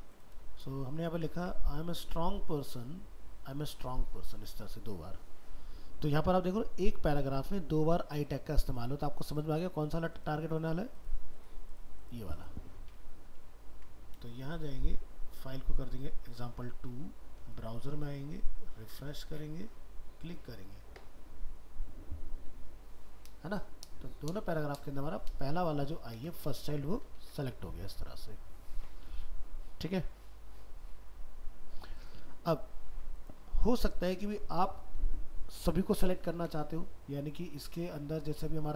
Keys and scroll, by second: 0.4 ctrl+a, 13.8 ctrl+s, 16.9 ctrl+s, 27.3 ctrl+w.